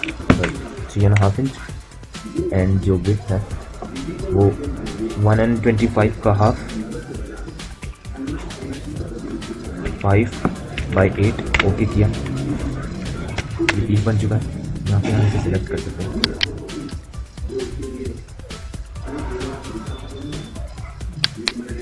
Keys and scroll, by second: 11.1 Return, 13.4 space, 17.3 ctrl+z, 20.4 q.